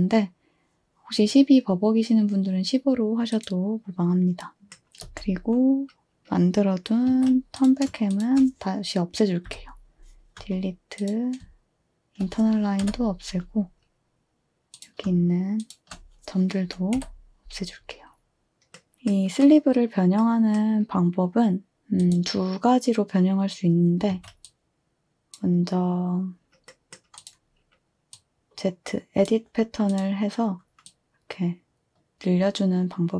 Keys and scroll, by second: 4.5 space, 5.0 space, 7.1 a, 9.5 Delete, 12.8 Delete, 17.0 Delete, 24.1 a.